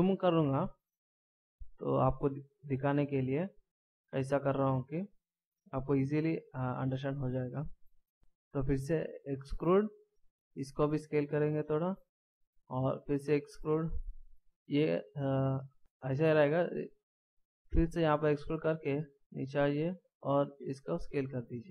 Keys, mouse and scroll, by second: 0.0-1.4 scroll up 2, 1.4-1.8 ctrl+scroll down 1, 1.8-2.6 ctrl+scroll up 1, 2.6-3.0 shift+scroll down 1, 7.8 s, 8.9 e, 10.9 s, 12.9 e, 18.1 e, 20.6 s.